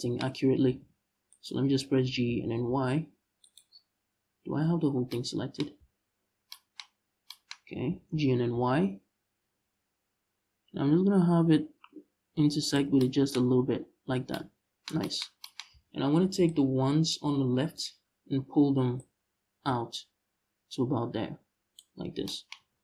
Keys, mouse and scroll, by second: 0.3 g, 1.1 right click, 1.7 g, 3.2 right click, 3.4-3.7 scroll down 1, 4.0-4.8 scroll up 1, 5.5 ctrl+z, 6.5 scroll up 1, 7.6 g, 12.4 shift+click, 13.1-13.8 scroll up 1, 13.8 scroll down 1, 15.4 z, 16.1 ctrl+click, 17.2 scroll up 1, 17.4 z, 18.7-22.8 drag, 21.6-22.0 scroll down 2, 22.2 Tab, 22.4 scroll down 2.